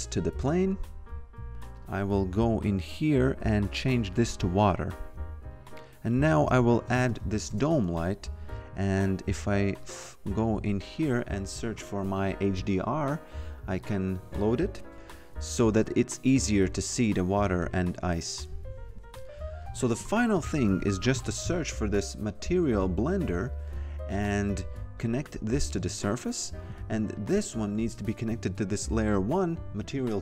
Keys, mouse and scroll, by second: 1.8 click, 5.8 click, 6.2-7.4 typing, 7.5 Return, 9.8 click, 12.6 click, 14.9 click, 20.3-22.0 typing, 23.3 click, 27.2 click, 29.8 click.